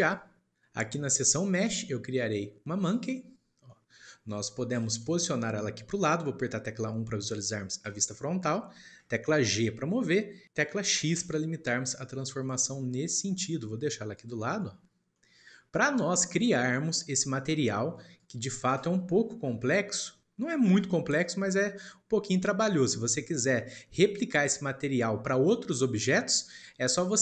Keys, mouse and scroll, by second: 3.4 scroll down 2, 3.7 middle click, 3.9-6.9 scroll up 1, 7.8 KP_1, 8.6 shift+middle click, 9.6 g, 14.6-16.7 shift+middle drag, 16.7-17.4 scroll up 2, 18.1 click, 19.0 scroll down 1, 20.1-20.5 scroll up 3, 20.5-23.5 middle drag, 26.6-27.2 shift+middle drag.